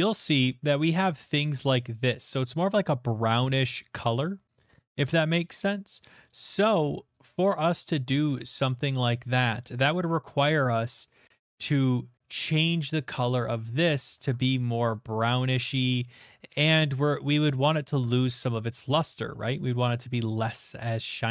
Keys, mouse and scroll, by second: 0.6 click, 1.5 scroll, 3.5 middle click, 6.2 click, 6.8 middle click, 6.8 middle click, 7.6 scroll, 8.8-11.6 shift+middle click, 9.6-10.9 scroll, 10.9-11.4 scroll, 11.6 middle click, 12.0 middle click, 13.4 click, 14.2 alt+Tab, 18.0 alt+Tab, 19.3 middle click, 19.6 shift+middle click, 20.1 middle click, 20.4 shift+middle click, 20.8 middle click.